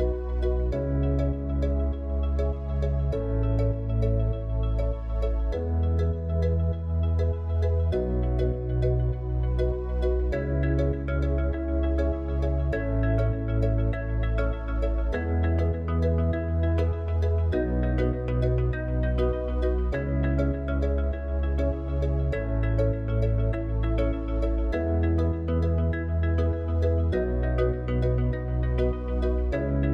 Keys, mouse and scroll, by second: 5.3-8.8 drag, 10.8 click, 12.1-20.5 drag, 22.4 click, 24.7 drag.